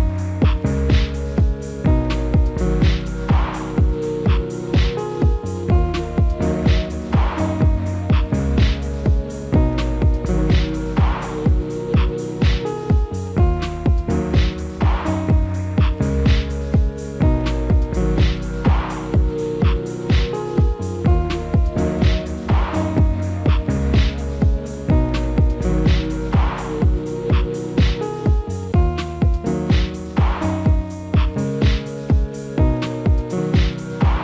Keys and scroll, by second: 13.6 alt+w, 21.5 ctrl+a, 28.4 alt+w.